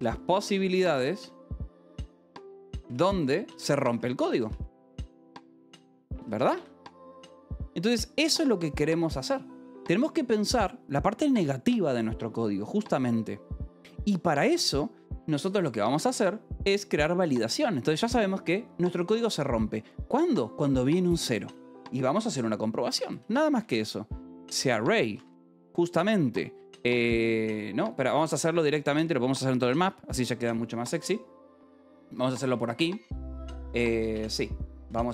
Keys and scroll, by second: 0.0-6.9 typing, 16.4 o, 16.5 BackSpace, 23.0-25.7 typing, 26.9 Escape, 29.2-30.9 typing, 32.3 h, 33.2 a, 34.1 Escape, 34.2-35.1 typing.